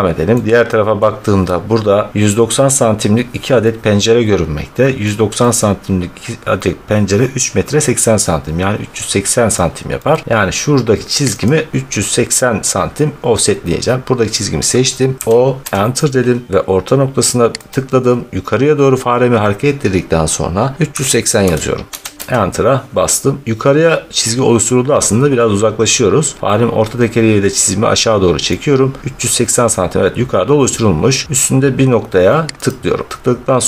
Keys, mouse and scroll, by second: 0.2 scroll, 0.8 scroll, 1.6-2.0 scroll, 2.2 scroll down 11, 4.9 scroll, 9.4 middle click, 10.1-10.4 scroll, 11.3 click, 15.2 o, 15.6 Return, 17.6 click, 20.8-22.2 typing, 25.2-25.6 scroll, 28.4-29.1 scroll, 32.5 click.